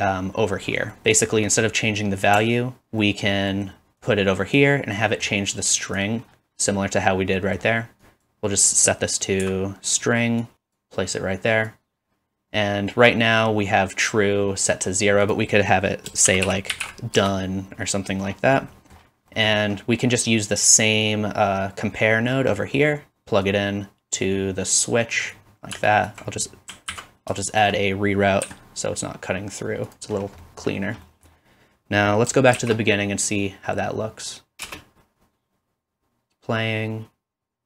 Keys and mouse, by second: 2.5-25.9 alt+drag, 25.9-30.0 ctrl+right drag, 26.9 ctrl+z, 28.4 g, 30.0-32.3 drag, 32.5 shift+Left, 34.7 space.